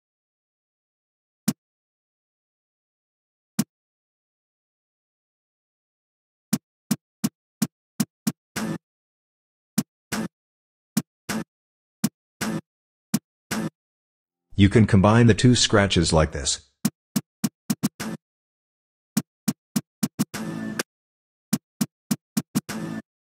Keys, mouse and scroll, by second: 0.3 a, 1.4 g, 2.6 a, 3.6 g, 4.6 a, 6.3-14.0 typing, 16.6-23.3 typing.